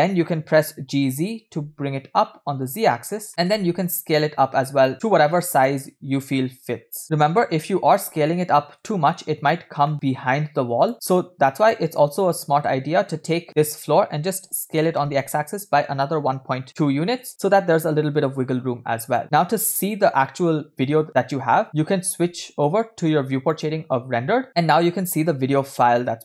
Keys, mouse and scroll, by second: 3.7 s, 7.0-8.0 middle drag, 8.1 KP_7, 8.9 shift+middle drag, 9.2 scroll up 2, 9.9 shift+middle drag, 10.8 click, 10.9-12.3 middle drag, 12.3 scroll down 1, 12.8-13.1 shift+middle drag, 13.6-14.3 shift+middle drag, 14.7 s, 19.1-24.4 drag, 24.5 shift+middle click, 24.7 scroll up 2.